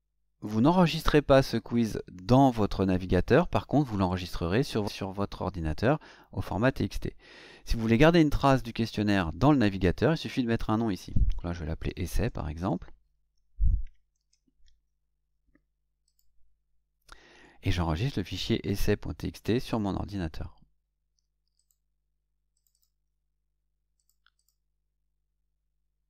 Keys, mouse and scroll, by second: 11.6-13.1 typing, 14.1 Caps_Lock, 16.0 click, 19.6 click, 21.5 click, 22.5 click, 23.9 click, 24.3 click.